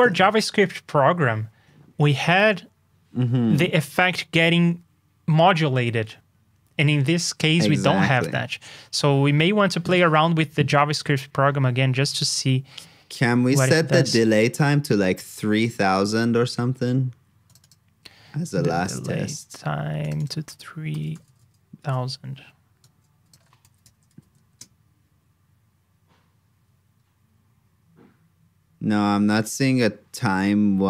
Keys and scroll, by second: 10.9 super+Tab, 16.0 super+Tab, 23.6 super+c, 23.9 super+j.